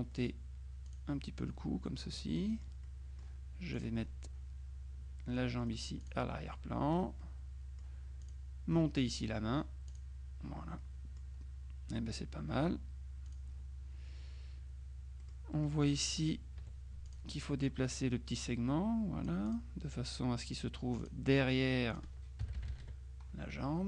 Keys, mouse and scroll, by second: 1.0 click, 2.3 middle click, 3.8 click, 6.1 click, 7.3 click, 8.3 click, 9.9 click, 10.9 click, 13.3 click, 15.3 click, 16.7 F2, 17.1 click, 18.5-20.1 drag, 21.1 click, 22.0 click, 22.5 KP_Subtract.